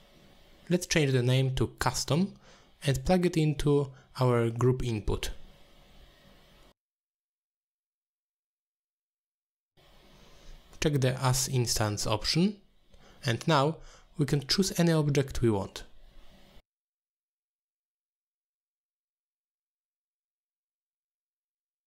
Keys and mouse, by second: 0.2 click, 0.3-2.4 drag, 3.5 n, 4.9 click, 5.2 middle click, 5.5 shift+d, 7.2 ctrl+h, 7.6 middle click, 8.5-10.0 drag, 10.5 click, 11.7 ctrl+h, 12.2 click, 12.6 middle click, 13.9 click, 14.9 n, 18.4 click, 18.8 click, 20.8 click.